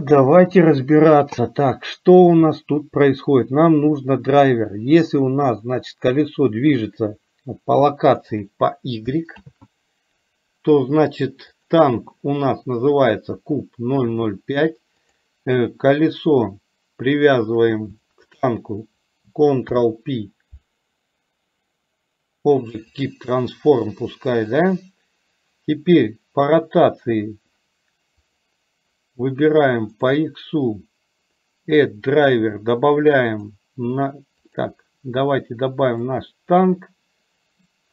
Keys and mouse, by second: 5.6-8.3 drag, 9.5 ctrl+z, 11.6 click, 18.1 shift+click, 19.8 ctrl+p.